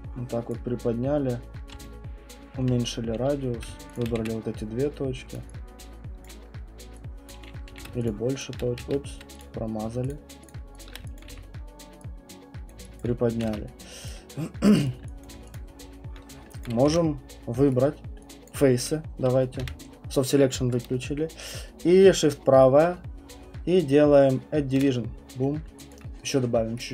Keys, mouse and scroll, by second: 0.5 click, 1.7-2.6 typing, 2.6 middle click, 3.9 shift+click, 4.1 w, 5.3 click, 6.2 click, 7.3 click, 7.7 q, 8.1 shift+click, 8.4 shift+click, 8.8 ctrl+z, 9.4 click, 10.1 shift+click, 10.5 shift+click, 10.8 shift+click, 11.1 alt+click, 11.3 w, 12.7 click, 13.0 alt+click, 13.5 ctrl+z, 14.1 right click, 14.8 right click, 15.2 alt+click, 15.5 click, 16.6 click, 17.7 ctrl+1, 17.7 right click, 17.9 scroll, 18.5 click, 19.6 b, 21.8 middle click, 22.1 middle click, 24.8 right click, 25.2 middle click, 25.3 middle click, 25.9 alt+click, 26.7 right click.